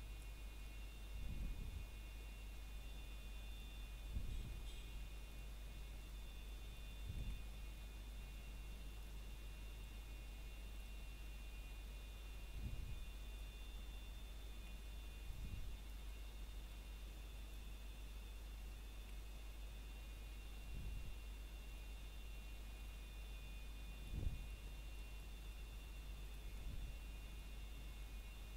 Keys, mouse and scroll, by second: 0.0 scroll down 1, 1.1 Escape, 1.9 click, 2.8 scroll down 1, 3.1 middle click, 3.5 shift+middle click, 3.9 scroll up 1, 5.3 ctrl+right click, 7.7 a, 8.4 ctrl+right click, 9.6 click, 10.8 scroll down 1, 11.1 middle click, 11.5 scroll up 1, 12.2 middle click, 12.8 scroll up 1, 13.4 middle click, 13.8 scroll up 1, 15.0 alt+click, 17.9 ctrl+right click, 19.3 click, 21.3 scroll down 1, 21.6 middle click, 22.2 scroll up 1, 23.0 middle click, 25.1 a, 25.5 ctrl+right click, 27.0 click, 28.3 scroll down 1.